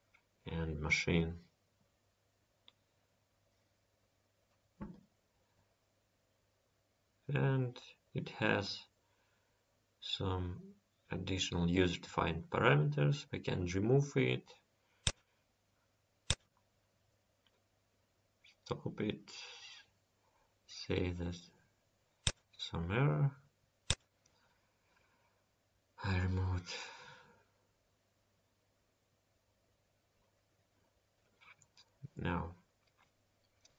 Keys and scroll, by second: 3.3 ctrl+s, 8.9 Home, 12.3 ctrl+s, 25.7 Home, 29.8 ctrl+s.